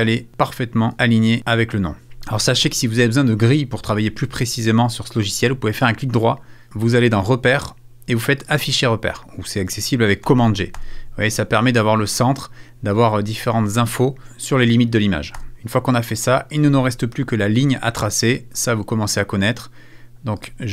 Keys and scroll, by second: 10.2 super+g.